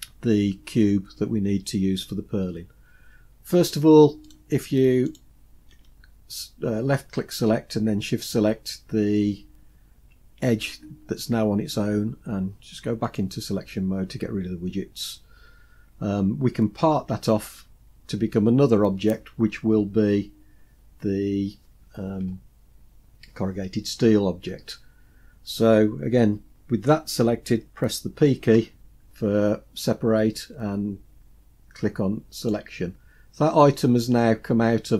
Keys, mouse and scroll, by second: 4.3 click, 5.1 shift+click, 13.1 click, 30.4 p.